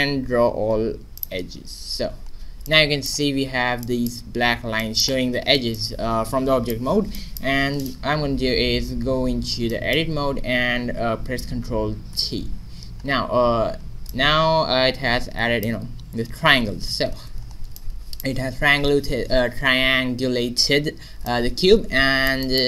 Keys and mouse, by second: 2.6 middle click, 3.2 a, 7.8 right click, 8.6 Tab, 12.0 ctrl+t, 12.5 middle click, 13.3 a, 16.7 Tab, 17.4-21.2 middle drag, 21.4 middle click, 22.0 middle click.